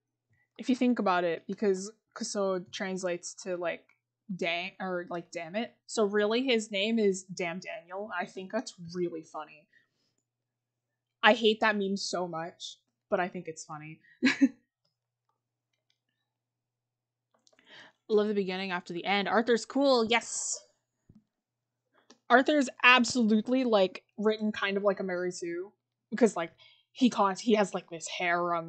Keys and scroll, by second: 14.5 scroll, 17.4-18.6 scroll, 21.9 scroll.